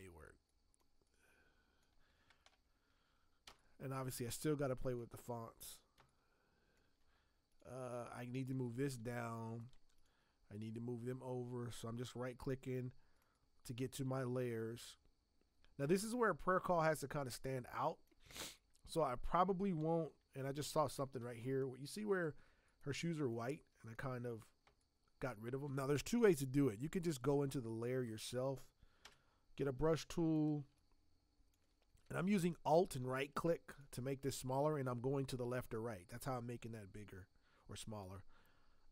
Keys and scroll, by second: 3.4 v, 5.4 space, 5.9 space, 18.3 space, 21.2 z, 24.6 space, 29.0 b.